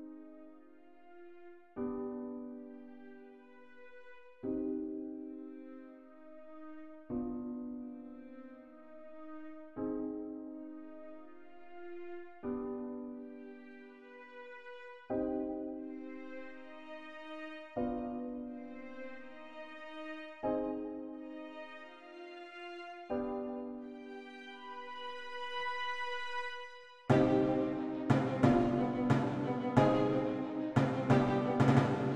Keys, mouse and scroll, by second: 13.5 click, 18.6 click, 21.3-21.7 typing, 24.8-25.8 typing, 26.2 Return, 29.3 click.